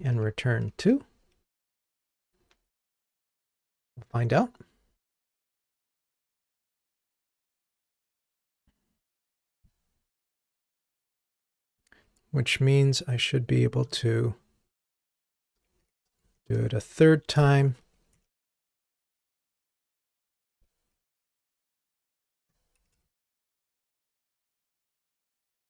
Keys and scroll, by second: 0.9 ctrl+r, 15.2 super+v, 18.3 super+BackSpace, 22.9 ctrl+r.